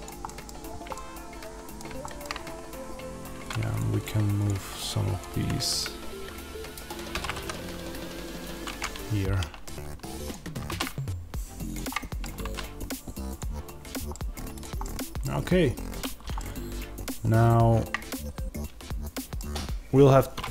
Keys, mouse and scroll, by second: 0.1 middle click, 0.4-0.8 scroll, 2.3-3.4 scroll, 3.6-7.0 shift+drag, 7.0 alt+d, 8.7-10.2 middle drag, 10.2 click, 10.5 alt+d, 11.8-13.2 middle drag, 14.0 middle click, 14.4 click, 14.7-20.5 middle drag, 15.1-16.3 scroll down 2.